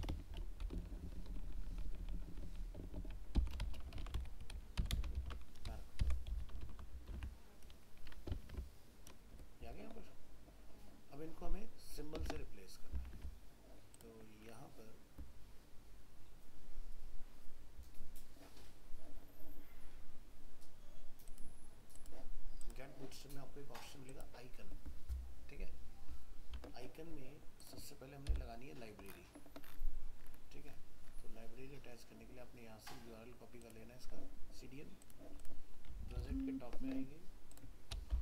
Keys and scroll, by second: 4.0 ctrl+x, 7.1 alt+Tab, 12.3 alt+Tab, 36.2 ctrl+Home.